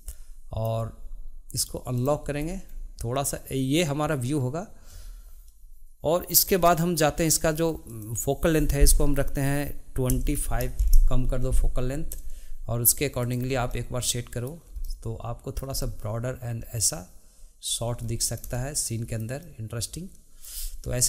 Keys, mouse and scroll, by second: 1.9 click, 2.3-2.7 scroll up 2, 7.9-10.9 drag, 13.2 click, 13.7-17.6 shift+middle drag, 17.9 middle click, 18.0-18.6 scroll up 1, 18.6-19.7 shift+middle drag.